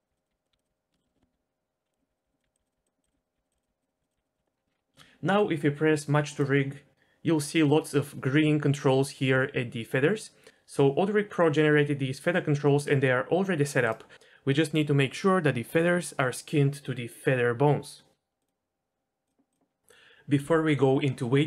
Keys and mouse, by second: 0.0-4.4 typing, 0.2 click, 1.9 click, 2.2 click, 2.4 click, 3.8 click, 4.9 shift+middle click, 11.6 r, 13.8 middle click, 18.4 middle click, 19.2 middle drag.